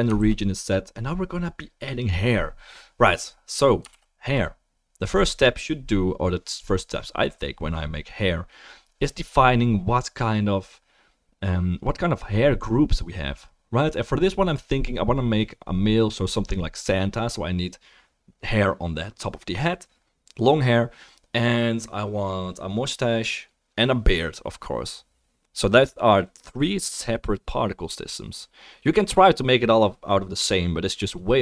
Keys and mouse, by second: 0.2 ctrl+s, 0.9 click, 3.9 ctrl+s.